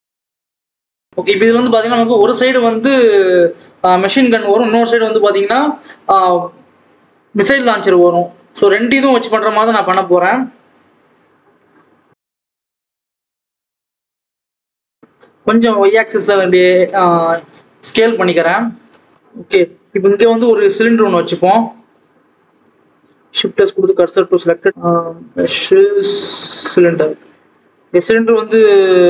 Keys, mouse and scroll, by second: 0.2 ctrl+z, 0.4 ctrl+z, 0.8 shift+click, 1.3 click, 2.0 ctrl+KP_1, 2.8 click, 4.4 click, 4.6 scroll down 1, 4.9 e, 7.1 click, 7.7 e, 9.0 scroll down 2, 9.3 click, 9.8 alt+z, 10.5 2, 10.6 click, 11.1 ctrl+b, 11.9 alt+a, 12.1 click, 12.4 click, 12.8 ctrl+b, 13.5 Tab, 13.7 alt+a, 13.8 click, 14.2 Tab, 14.4 a, 14.5 s, 16.6 Tab, 17.0 alt+a, 17.2 click, 18.4-19.1 scroll down 1, 19.1 ctrl+s, 19.1 scroll up 2, 19.3 click, 20.1 click, 20.5 Tab, 20.8 click, 21.9 shift+click, 23.5 shift+s, 23.6 Tab, 23.9 alt+a, 24.7 ctrl+z, 26.5 shift+a.